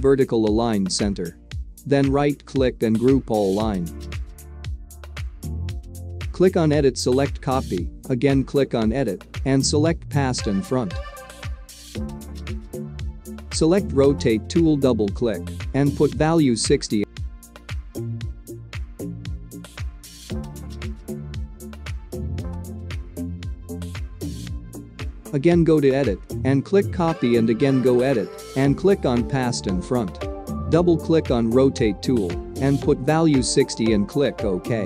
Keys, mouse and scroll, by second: 2.6 right click, 6.0 click, 15.2 click, 24.9-28.1 drag.